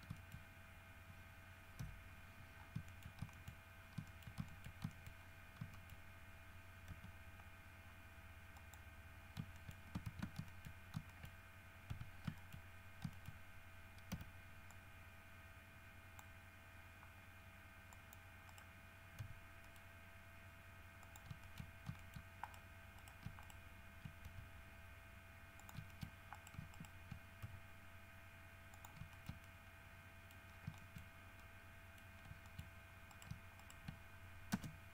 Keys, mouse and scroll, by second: 0.4 shift+middle click, 0.6 shift+scroll up 2, 2.0 KP_3, 2.8-3.1 scroll down 3, 3.1 shift+middle click, 3.4 shift+scroll up 1, 3.5 shift+middle click, 4.3 shift+middle click, 4.8 shift+middle click, 5.1 shift+middle click, 5.4 shift+scroll up 2, 6.0 shift+middle click, 7.1 z, 8.8 middle click, 9.4 scroll up 3, 9.8 shift+middle click, 10.3 alt+shift+a, 10.7 alt+shift+middle click, 11.3 alt+shift+middle click, 12.1 1, 12.6 shift+middle click, 13.4 shift+middle click, 14.3 c, 14.9-16.6 drag, 18.1 click, 18.7 right click, 19.4 g, 19.8 middle click, 21.2 shift+middle click, 21.6 shift+middle click, 22.2 shift+middle click, 22.6 shift+right click, 23.2 shift+right click, 23.6 shift+right click, 24.5 shift+g, 25.8 shift+click, 26.1 shift+middle click, 26.6 shift+right click, 27.0 shift+middle click, 27.6 shift+g, 29.0 shift+middle click, 29.4-30.7 shift+middle drag, 30.7 scroll down 1, 30.9 shift+scroll up 1, 31.0 shift+middle click, 31.1 shift+scroll down 1, 31.3-32.1 shift+scroll up 3, 31.6 shift+middle click, 32.1 middle click, 32.5 shift+middle click, 32.8 shift+middle click, 33.3 scroll up 1, 33.5 shift+middle click, 33.8 shift+middle click, 34.7 space.